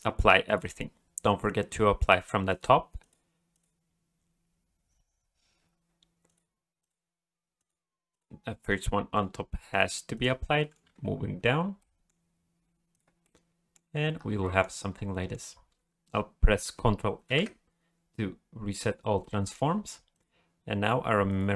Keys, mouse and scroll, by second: 0.5 click, 2.5 click, 3.5 click, 6.3 click, 6.8 click, 7.6 click, 8.7 click, 9.7 click, 10.6 middle click, 10.9 alt+a, 11.0-11.8 scroll up 2, 11.8 middle click, 12.9 click, 13.2 middle click, 14.2 scroll down 2, 14.4 middle click, 15.1 middle click, 17.3 ctrl+a, 19.2 middle click, 20.1 click.